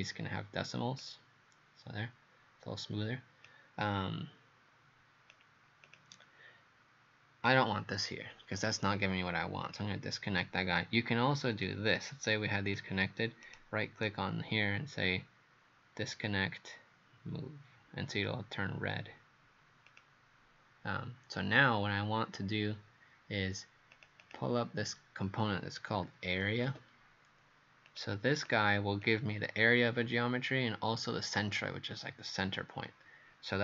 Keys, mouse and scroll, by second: 13.4 right click, 19.9 click, 24.2 click, 25.7-27.1 typing, 27.9 click, 28.5 click.